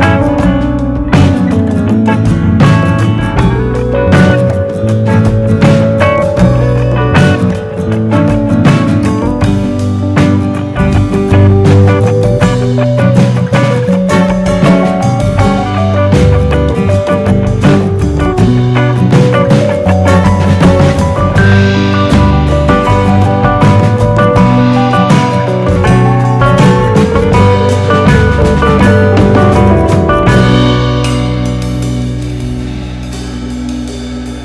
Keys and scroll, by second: 5.3 super+c, 5.5 super+v.